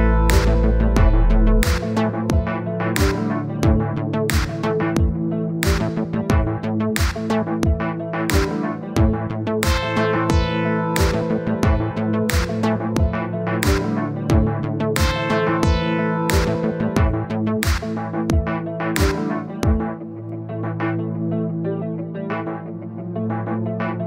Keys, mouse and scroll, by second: 1.3 middle click, 1.7-3.9 drag, 3.9 middle click, 4.1-4.5 scroll down 1, 4.5 click, 5.2-5.5 scroll up 2, 5.5 click, 6.3 scroll down 2, 6.4-7.4 middle drag, 7.4 scroll up 2, 7.6 middle click, 8.0 click, 8.9 middle click, 9.6 click, 10.4 middle click, 10.8 click, 11.7-12.8 middle drag, 12.8-13.5 scroll down 1, 13.5 click, 13.7-14.9 middle drag, 14.9 click, 15.2-16.4 middle drag, 16.4 click, 17.1 middle click, 17.4-17.7 scroll up 2, 17.7 click, 18.1 middle click, 18.5-19.5 drag, 19.5 middle click, 20.4-21.7 drag, 22.4-24.0 drag.